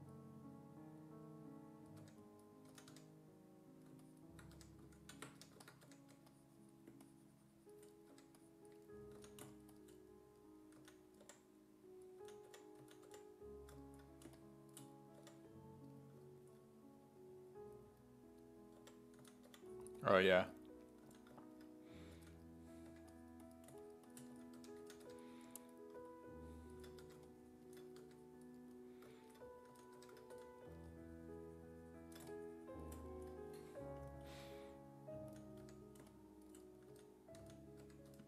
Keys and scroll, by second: 2.0-3.4 typing, 4.6 1, 5.0 ctrl+z, 5.4 1, 5.9 1, 6.2 1, 8.1 1, 9.2 s, 10.8-13.6 typing, 15.2 5, 18.6-20.0 typing, 21.1 s, 22.2 s, 22.9 1, 24.1-25.6 typing, 27.1 1, 28.0 1, 29.5-30.9 typing, 35.3 s, 35.6 1, 36.7-38.2 typing.